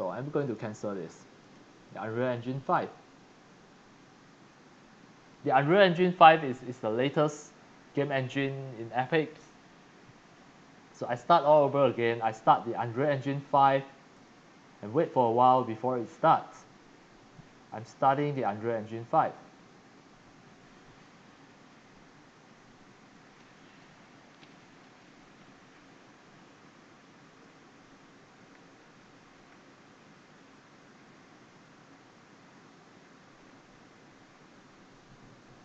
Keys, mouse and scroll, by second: 0.4 click, 1.4 click, 2.6 click, 8.0 click, 10.1 middle click, 14.1 click, 15.5 click, 16.0 click, 18.3 click, 20.3 click, 21.0 click.